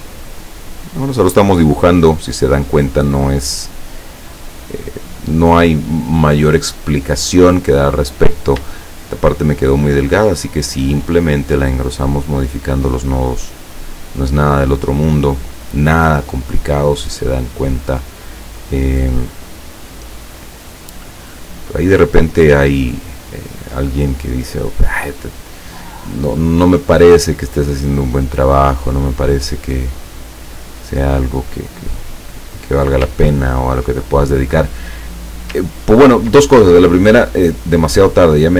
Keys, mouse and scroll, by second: 0.1 click, 3.6 click, 4.8 click, 6.8 click, 8.2 click, 9.9-11.7 drag, 12.5-13.6 drag, 14.2-15.9 drag, 16.6-18.1 drag, 18.4-20.0 drag, 21.2-24.8 drag, 27.0 click, 28.0-29.3 drag, 29.6-32.5 drag, 33.3-33.7 ctrl+scroll down 1, 35.8 ctrl+scroll up 2, 36.8-37.1 ctrl+scroll up 2, 38.0 click.